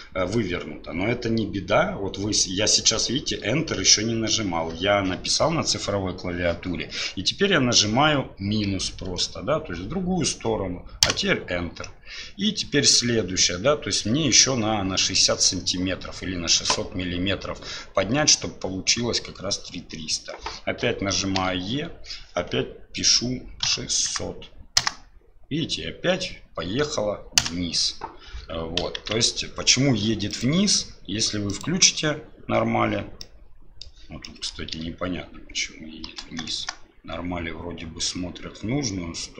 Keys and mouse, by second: 29.0 ctrl+z, 30.4-32.9 drag, 33.2 middle click, 34.2 middle click.